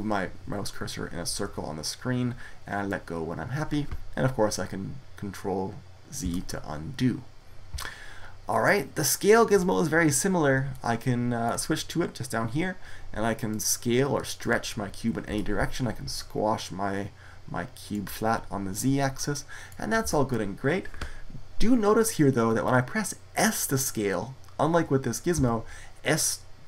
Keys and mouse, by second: 6.0 ctrl+z, 10.7 middle click, 13.4-15.1 drag, 15.1 ctrl+z, 15.9-17.8 drag, 19.9 ctrl+z, 25.2 s.